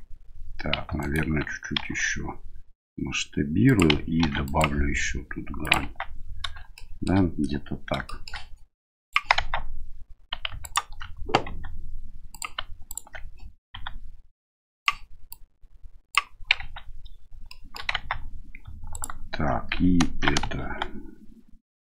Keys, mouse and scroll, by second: 1.0 right click, 1.8 s, 4.2 ctrl+r, 5.8 Tab, 6.7-7.0 shift+middle drag, 8.0 shift+middle drag, 9.0 click, 9.3 Tab, 10.6 alt+right click, 11.4 s, 12.8 alt+right click, 13.7 s, 15.3 click, 16.6 Tab, 17.4 shift+middle drag, 18.9 alt+right click, 20.5 s.